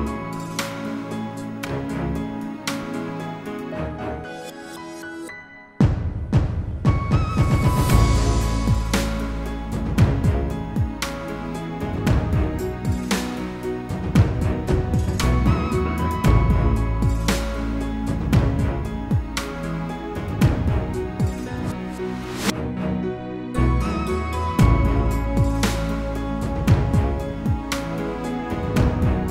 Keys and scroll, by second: 13.9 ctrl+g.